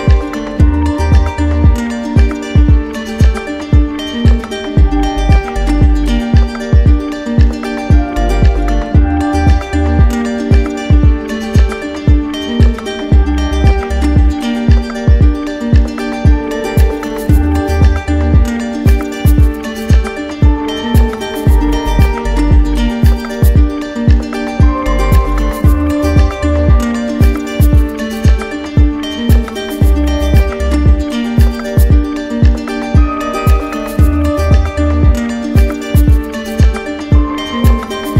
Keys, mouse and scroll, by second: 1.4 click, 3.2 click, 4.7 right click, 5.3 click, 7.1 right click, 10.3 z, 12.6 click, 14.3 right click, 15.4 alt+right click, 16.3 alt+right click, 18.6 alt+right click, 19.8 right click, 20.4 alt+right click, 21.3 right click, 24.6 ctrl+click, 25.4 ctrl+w, 26.6 click, 28.4 click, 29.2 click, 30.0 ctrl+z, 31.9 z, 33.4 click, 34.9 click, 36.7 ctrl+click.